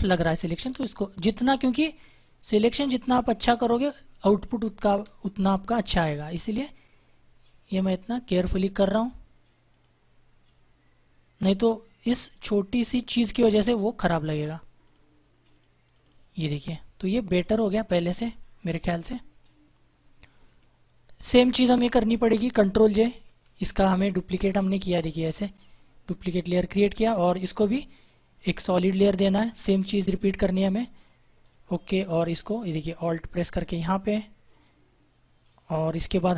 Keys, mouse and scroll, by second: 1.2 click, 3.8 space, 4.1 click, 4.3 space, 4.8 space, 6.3 click, 18.9 ctrl+-, 23.0 ctrl+j, 24.3 click, 26.0 ctrl+z, 28.3 click, 33.5 alt+click.